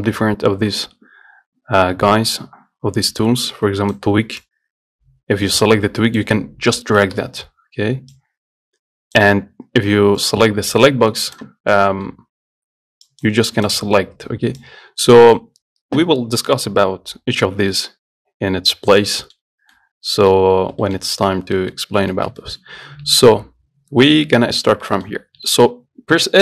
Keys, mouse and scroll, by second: 4.7 click, 7.5 ctrl+z, 8.4-11.5 drag, 11.8-12.1 scroll down 4, 12.1 middle click, 12.4 scroll up 3, 13.7 click, 14.8-17.7 drag, 18.3-19.4 scroll down 1, 19.4 middle click, 19.7 scroll up 1, 20.0 middle click, 20.8-21.1 scroll down 1, 21.1 shift+middle click, 21.3 scroll up 1, 21.5 scroll down 1, 21.8 middle click, 22.0 scroll up 1, 22.4-25.4 shift+middle drag, 25.4-25.7 scroll up 2, 25.7-26.4 shift+middle drag.